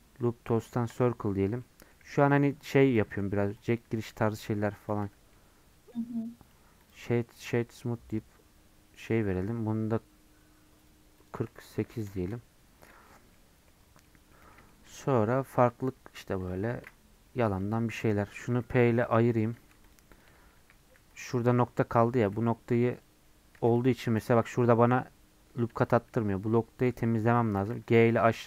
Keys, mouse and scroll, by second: 1.0 right click, 1.6 middle click, 2.0 e, 5.1 Tab, 5.2 scroll down 4, 5.4-6.9 middle drag, 6.9-8.1 right drag, 8.1-13.1 drag, 13.1 middle click, 13.4 scroll up 1, 13.7 middle click, 14.1 scroll down 1, 14.3 middle click, 14.9 scroll up 1, 15.2 middle click, 15.6 Tab, 16.7 ctrl+r, 18.1 click, 19.4 p, 19.8 click, 20.3 Tab, 21.2 click, 22.3 g, 23.9 Tab, 24.3 ctrl+r.